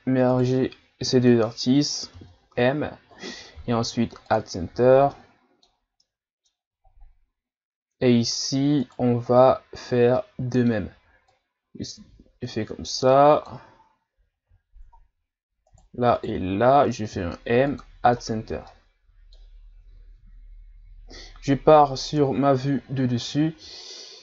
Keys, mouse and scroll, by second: 0.3 shift+right click, 2.1 m, 4.8-5.1 scroll down 1, 5.1-6.8 middle drag, 6.8-7.2 scroll down 1, 7.2 scroll up 1, 8.2-8.8 scroll down 1, 8.8 right click, 10.2-11.3 middle drag, 11.3 click, 14.6-15.7 scroll down 2, 15.7 right click, 16.1 shift+right click, 17.1 m, 18.2-18.6 scroll down 2, 18.6-21.7 middle drag, 22.2 KP_7, 23.3 scroll down 1.